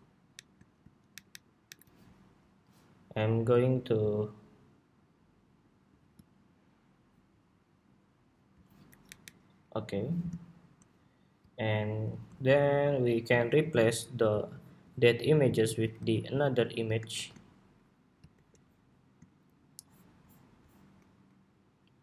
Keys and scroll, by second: 0.8 alt+Down, 1.0 alt+Down, 1.4 alt+Down, 15.7 super+c, 16.8 shift+super+v, 18.0 super+2.